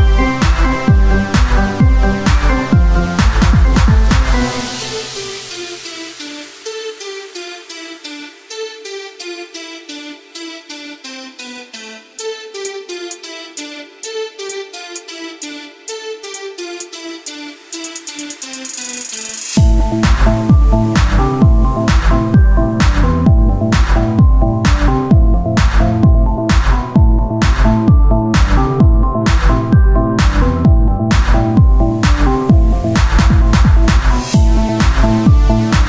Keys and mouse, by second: 0.4 KP_3, 1.3 r, 2.8 click, 4.1-6.4 drag, 7.0-10.7 right drag, 8.5 s, 10.7 click, 12.1 Tab, 13.3-14.8 right drag, 14.8 Tab, 20.3 s, 22.5 click, 24.4 KP_3, 25.4 r, 26.1-27.5 drag, 29.0 Tab, 31.0 Tab, 31.5-35.4 drag, 32.8 right click, 35.4 middle click.